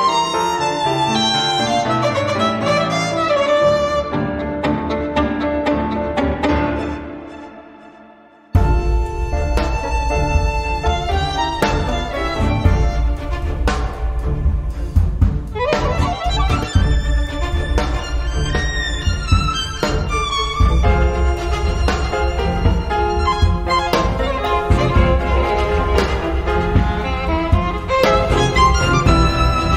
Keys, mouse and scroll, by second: 0.0 click, 1.2 0, 2.7 click, 4.6 x, 5.0 0, 6.8 click, 8.3 -, 9.3 x, 9.8 1, 11.5 click, 13.0-13.7 scroll down 2, 14.4-15.7 drag, 16.0-17.1 drag, 18.3 right click, 21.8 click, 23.3 click, 24.6 click, 25.9 click, 26.6 right click, 27.9 click, 29.5 click.